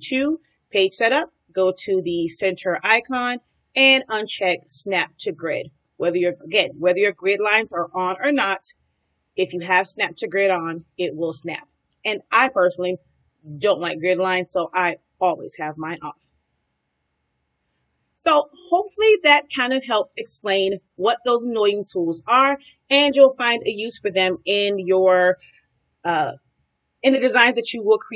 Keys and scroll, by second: 17.8 space.